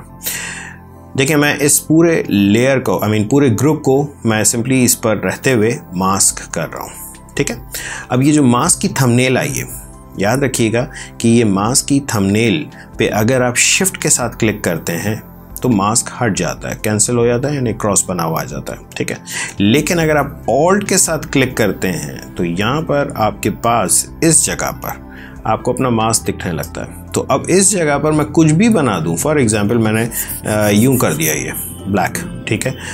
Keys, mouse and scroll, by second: 4.1 right click, 16.0 shift+click, 18.3 shift+click, 24.6 ctrl+space, 25.0 click.